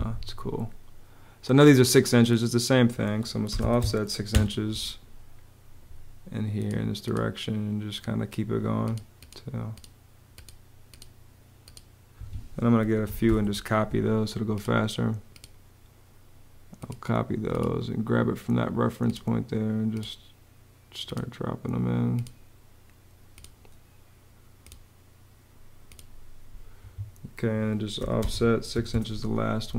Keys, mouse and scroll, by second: 3.1 o, 3.3 Home, 3.4 6, 4.0 Home, 11.8 Escape, 12.5-13.4 typing, 26.5 Escape, 27.7 o, 27.8 space, 28.4 6, 29.4 Return.